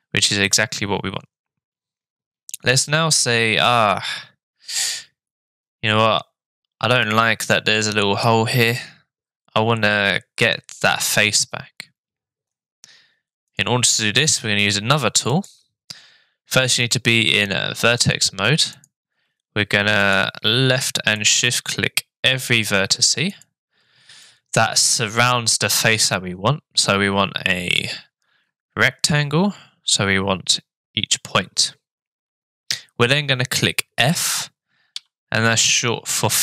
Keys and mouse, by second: 3.7-8.2 middle drag, 13.5 click, 15.3 click, 18.8 click, 21.2 shift+click, 24.2 middle click, 35.0 f.